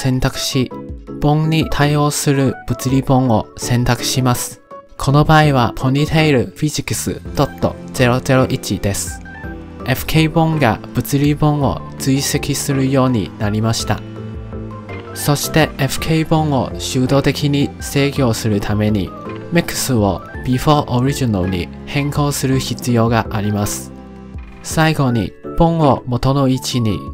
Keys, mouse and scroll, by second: 1.6-4.9 drag, 10.6-27.1 drag.